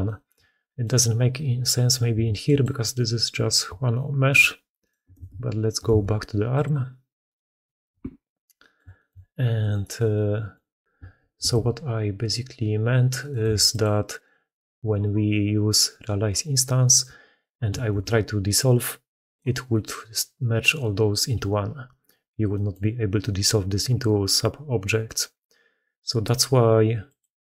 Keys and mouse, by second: 0.7 middle click, 2.0 x, 3.8-4.2 shift+drag, 4.7 click, 5.0 ctrl+x, 5.7 ctrl+x, 7.1 click, 7.7 KP_Decimal, 8.4 click, 8.8 shift+drag, 9.5 click, 10.0-10.4 drag, 11.2 ctrl+x, 13.3 x, 14.0 click, 17.8 ctrl+x, 19.6 middle click, 22.4 middle click, 27.0 middle click.